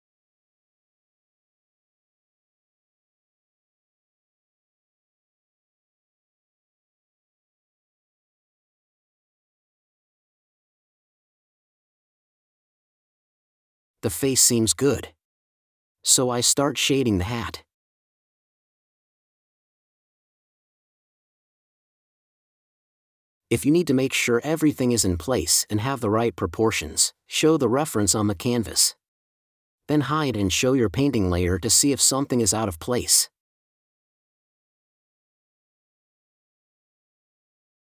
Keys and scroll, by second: 2.2 4, 12.7 super+z, 12.8 super+z, 13.0 super+z, 16.1 space, 19.9 4, 22.9 5.